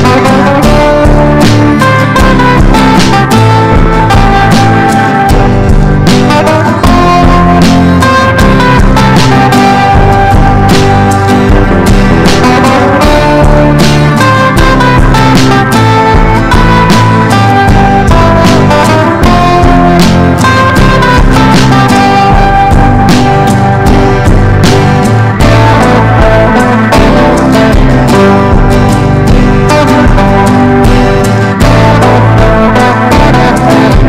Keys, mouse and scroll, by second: 0.3 click, 0.8 ctrl+shift+g, 1.5 click, 1.9 ctrl+shift+g, 2.9-12.2 drag, 16.3 ctrl+v, 17.1 Down, 17.2 Down, 17.3 Down, 18.0-21.2 drag, 21.4-25.1 typing, 25.7 click, 26.6 ctrl+e, 27.2 ctrl+b, 27.8 click, 30.3 shift+click, 30.8-34.0 drag.